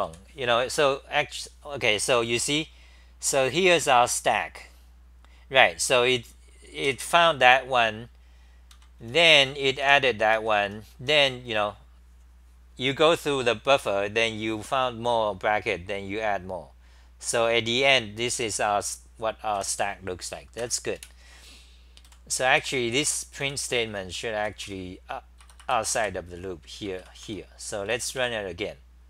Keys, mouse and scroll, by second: 1.8-2.6 scroll down 10, 8.5-10.3 typing, 10.4 ctrl+g, 13.3-14.2 scroll down 6, 13.3 t, 14.2-15.1 scroll down 4, 15.1-17.7 scroll down 24, 17.7-19.3 scroll down 2, 19.6 2, 20.6 ctrl+g, 21.0 super+w, 22.3-26.0 typing, 24.1 scroll, 25.4 Return, 25.6 Return, 27.2 ctrl+c.